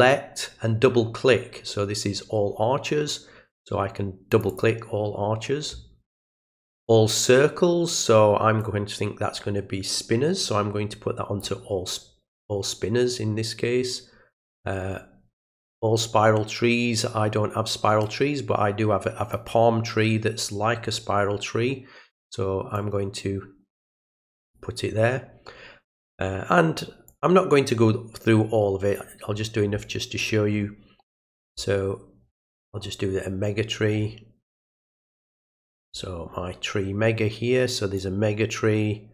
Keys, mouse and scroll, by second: 4.3 click, 4.5 click, 8.6-11.4 drag, 18.1-19.3 drag, 20.6-21.4 scroll down 1, 21.4 scroll down 1, 22.8-24.6 drag, 27.1-29.0 drag, 29.4-30.2 scroll down 4, 30.5-30.9 scroll down 2, 32.3-32.9 scroll up 2, 32.9-34.0 scroll up 1, 34.0-35.6 scroll up 1, 35.7 scroll down 1, 35.8 middle click, 38.0-39.1 drag.